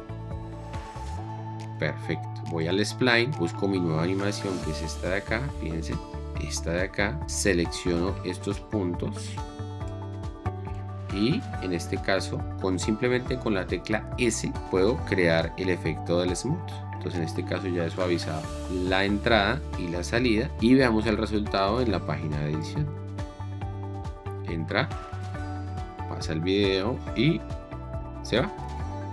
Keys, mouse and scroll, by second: 12.3 s, 20.6 shift+4, 23.6 space.